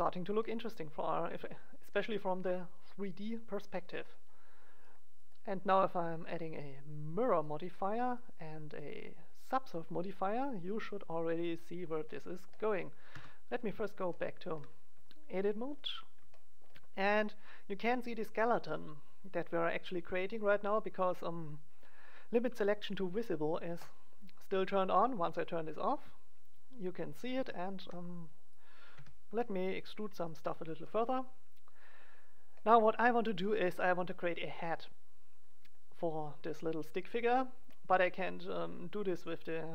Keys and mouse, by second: 4.8-6.9 drag, 6.9 middle click, 7.4-10.1 drag, 9.9-11.4 middle drag, 11.4 click, 12.0-13.1 middle drag, 13.1 KP_1, 23.7-25.6 drag, 26.0 right click, 27.3 e, 27.8 middle click, 28.9 e.